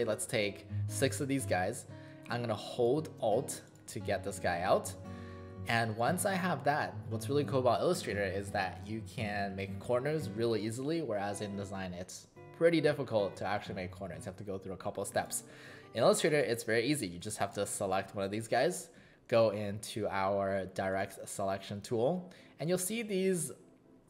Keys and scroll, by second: 5.9 space, 17.2 space.